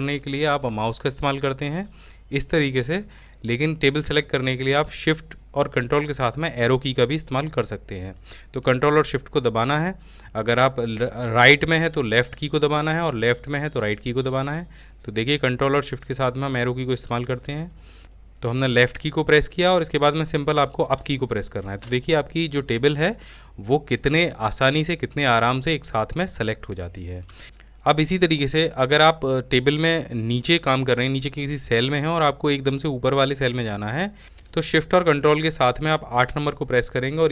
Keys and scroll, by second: 13.7 ctrl+s, 14.0 ctrl+shift+Left, 20.7 ctrl+s, 21.0 ctrl+shift+Up, 36.1 ctrl+shift+8.